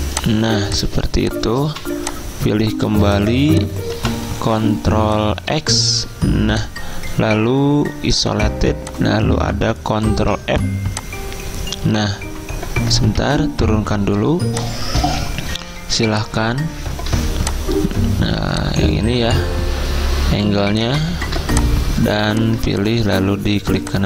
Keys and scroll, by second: 0.6 z, 1.7 v, 2.9 z, 5.9 ctrl+x, 10.1 ctrl+f, 13.3 ctrl+[.